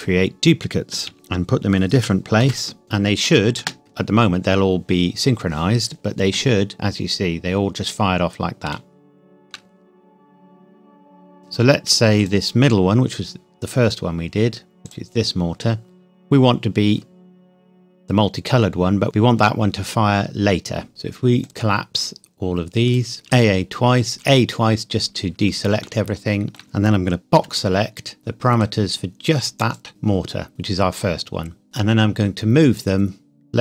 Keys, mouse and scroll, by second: 0.0 click, 1.1 shift+d, 2.0 g, 2.8 click, 3.6 space, 6.6-7.1 scroll down 1, 8.8 shift+middle click, 9.8-10.8 scroll up 1, 11.4 click, 14.8 click, 15.8-16.3 scroll up 1, 16.3-18.2 scroll down 1, 21.4 click, 23.2 a, 25.8 shift+middle click, 26.1 shift+middle click, 27.4 b, 28.6 click, 31.6 g.